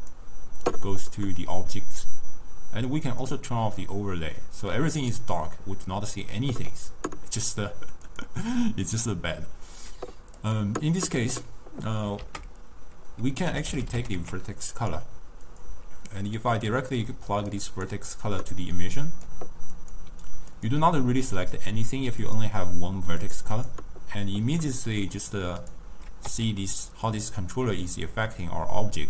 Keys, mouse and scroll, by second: 2.4-3.1 scroll down 1, 3.1 click, 8.1 click, 10.4 click, 12.3 ctrl+a, 16.7-17.6 middle drag, 17.6-20.7 drag, 22.3-23.7 drag, 25.7 click, 26.4 s.